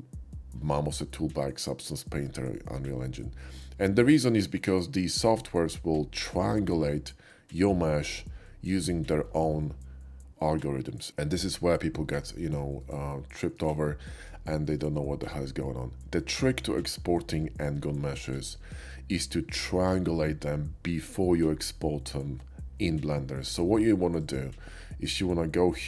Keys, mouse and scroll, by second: 12.1 middle click, 12.9 middle click, 13.9 shift+middle click, 14.5 shift+middle click, 24.2 click, 25.1 click.